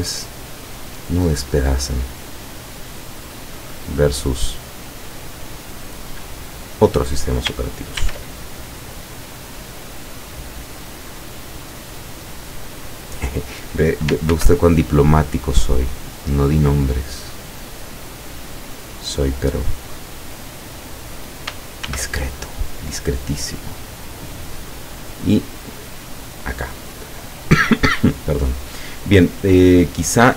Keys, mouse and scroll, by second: 6.6 click, 8.0 ctrl+r, 9.5 click, 12.9 click, 14.4 ctrl+r, 15.9 click, 20.7 click, 21.9 ctrl+r, 24.9 click, 27.0 click, 29.4 middle click.